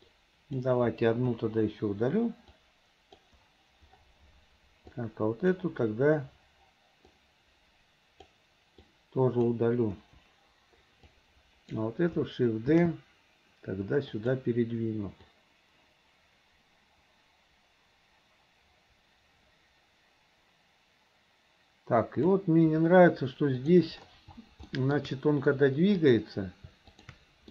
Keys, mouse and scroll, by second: 0.1-0.6 drag, 1.4 Delete, 2.6-3.3 drag, 5.0-5.6 drag, 7.2-8.3 drag, 8.9 click, 10.0 Delete, 11.1 click, 12.9 shift+d, 15.4-22.4 drag, 23.7 click, 24.7 shift+middle click, 26.0 click, 26.9 shift+click.